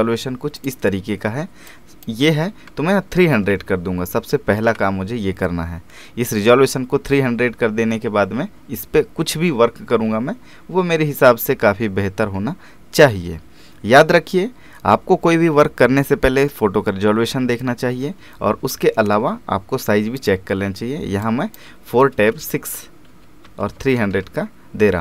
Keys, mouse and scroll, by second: 18.2 ctrl+Num_Lock, 20.2-22.5 drag, 22.5 Tab.